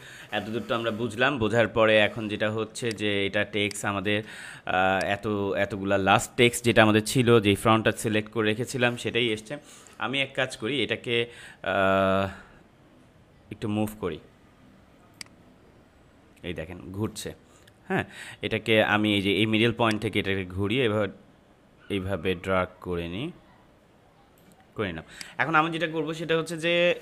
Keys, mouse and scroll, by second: 2.8 click, 3.5 space, 3.6 click, 4.9-15.0 drag, 15.1-19.6 drag, 19.8-25.1 drag.